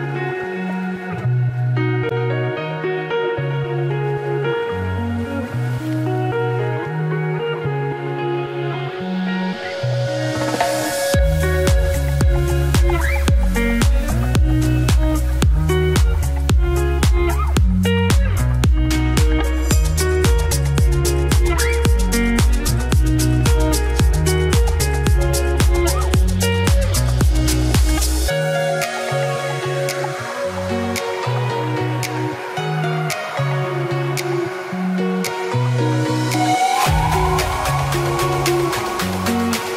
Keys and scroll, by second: 12.6 ctrl+t, 21.8 ctrl+t, 38.2 ctrl+t.